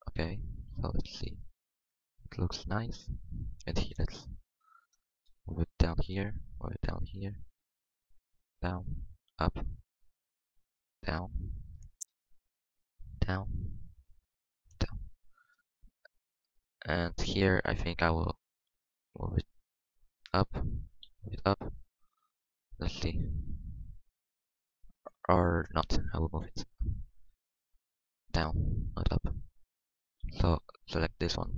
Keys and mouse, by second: 0.7 z, 1.0 Tab, 3.5 Tab, 5.1 middle click, 5.3 g, 5.8 g, 6.5 g, 7.3 middle click, 8.0 g, 8.5-9.6 middle drag, 9.1 g, 10.8 g, 13.1 g, 14.5 g, 16.5 Tab, 17.5 Tab, 18.7 g, 20.9 g, 22.2 g, 22.6 Tab, 26.4 Tab, 26.7 ctrl+z, 27.0 ctrl+z, 27.2 ctrl+z, 27.4 ctrl+z, 27.6 ctrl+z, 27.8 ctrl+z, 29.3 g, 30.9-31.5 drag, 31.2 g.